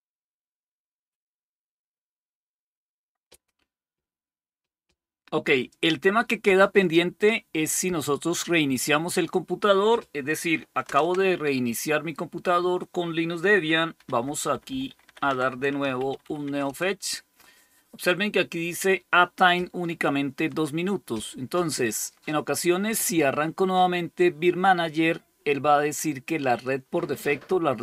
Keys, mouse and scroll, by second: 9.0 click, 10.7 super+Return, 13.9 ctrl++, 14.1 ctrl++, 14.2 ctrl++, 14.4 ctrl++, 14.5 ctrl++, 14.9 ctrl++, 15.1 ctrl++, 15.5-16.7 typing.